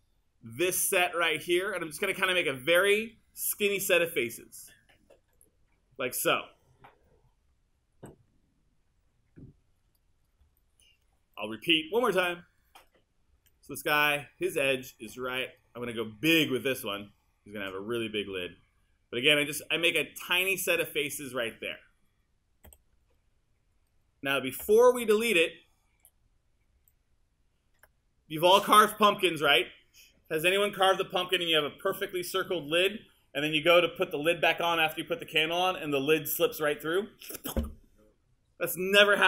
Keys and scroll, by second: 8.0 3, 22.7 q.